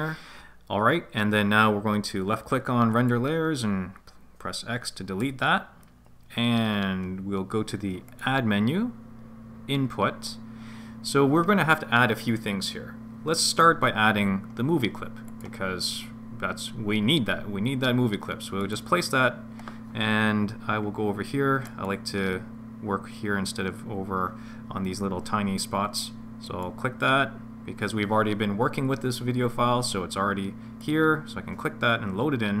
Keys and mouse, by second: 3.0 click, 5.2 x, 8.1-18.9 drag, 21.7 click, 26.6-31.7 drag.